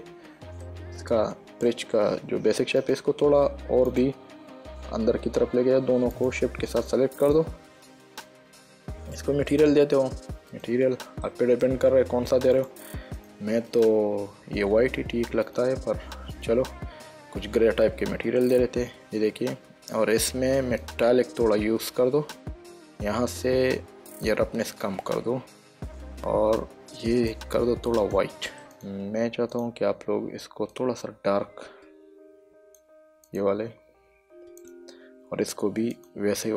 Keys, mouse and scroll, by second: 0.2 click, 1.0 middle click, 3.1 click, 3.6 Caps_Lock, 4.2 click, 6.4 shift+click, 7.7 click, 8.8 click, 9.8 click, 11.6 middle click, 12.9 click, 15.8 click, 18.2 click, 21.2 click, 24.6 click, 26.7 click, 29.1 click, 31.0 click, 33.6 click, 34.9 click, 36.3 click.